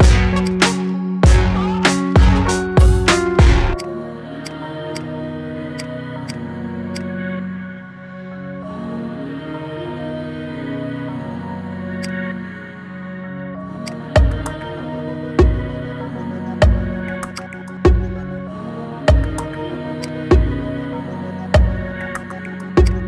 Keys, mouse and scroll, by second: 0.0 click, 0.5-3.1 right drag, 4.4-5.8 right drag, 5.8 click, 6.2 click, 6.6-7.0 middle drag, 7.0 drag, 7.4-7.7 shift+middle drag, 7.7-9.0 scroll down 1, 9.0 ctrl+2, 9.6-9.9 scroll down 2, 9.9-10.3 middle drag, 10.3-10.9 scroll up 3, 10.9-12.0 middle drag, 12.0 click, 13.0 ctrl+2, 13.3 scroll down 3, 13.5-13.8 middle drag, 13.8 click, 14.2 scroll down 2, 14.5-16.0 middle drag, 16.0-16.3 scroll up 3, 16.3-17.3 shift+middle drag, 17.3 drag, 18.1 g, 20.3-20.9 scroll up 3, 20.9-21.7 shift+middle drag, 21.7 g.